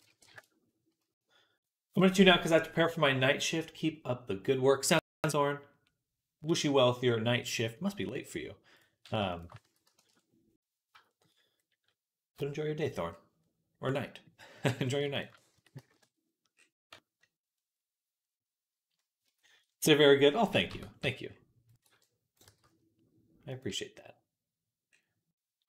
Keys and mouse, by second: 9.1 shift+click, 9.5 s, 10.7-13.2 shift+drag, 13.2-16.4 right drag, 15.4 s, 16.6 Tab, 19.6-25.4 right drag, 20.3 KP_1, 20.5 Tab, 20.9 z, 21.5 click, 21.7 b, 22.3 g, 23.5 z.